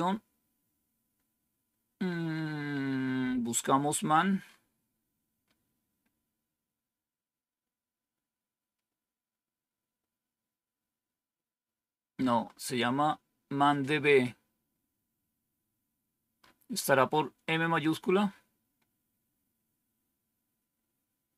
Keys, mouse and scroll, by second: 16.2 scroll up 1.